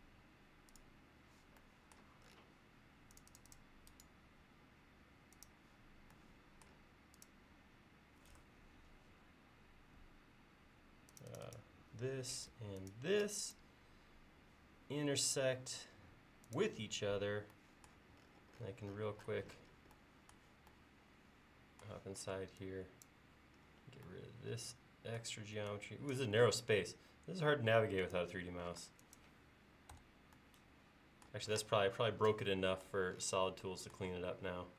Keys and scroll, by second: 22.3 e, 28.8 space, 30.0 BackSpace.